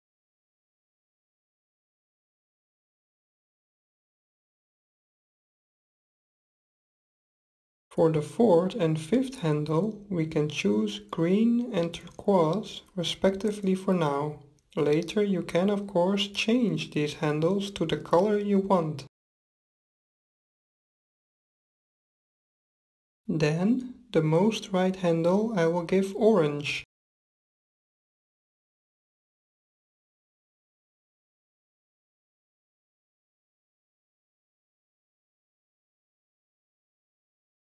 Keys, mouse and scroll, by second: 0.3-2.3 drag, 5.8-9.2 drag, 15.5-19.0 drag, 20.6-23.5 drag, 36.6-37.6 middle drag.